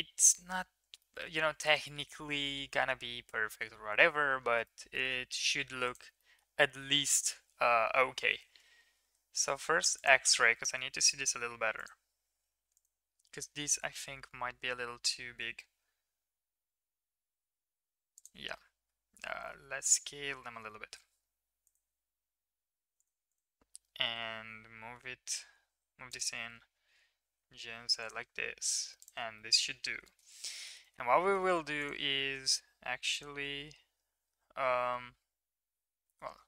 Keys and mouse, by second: 1.2 middle click, 1.9 middle click, 2.7 Tab, 4.6 shift+middle drag, 5.0 middle drag, 6.2 middle click, 6.8 middle click, 8.0 ctrl+KP_3, 10.6 middle click, 11.7 click, 13.5 g, 18.8 s, 23.0 click, 23.0 right click, 23.9 g, 26.9 g, 29.0 click, 29.0 right click, 29.5 middle click, 30.2 middle click, 30.9 middle drag, 31.5 shift+middle click, 32.3 Tab, 35.2 1.